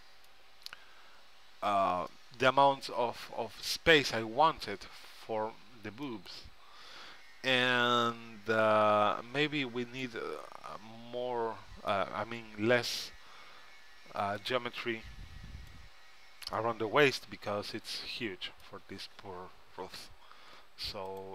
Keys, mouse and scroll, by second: 2.5-4.1 middle drag, 6.2-7.3 middle drag, 12.1-13.8 middle drag, 15.0-18.5 middle drag, 21.2-21.3 drag.